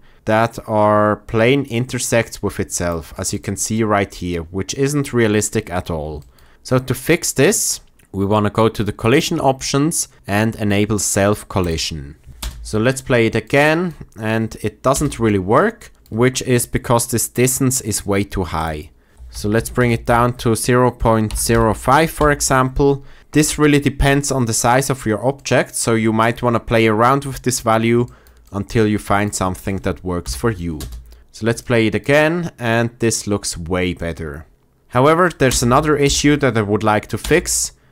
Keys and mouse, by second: 1.6 click, 3.7-6.0 drag, 6.1 shift+drag, 7.9-9.0 drag, 11.6 click, 12.3 shift+Left, 12.3 space, 15.0 space, 18.5-22.1 drag, 19.5 BackSpace, 20.0 BackSpace, 28.0 shift+middle click, 28.4 click, 30.2 shift+Left, 30.7 space, 33.3 drag, 35.4 space, 36.0 shift+Left, 37.1 space.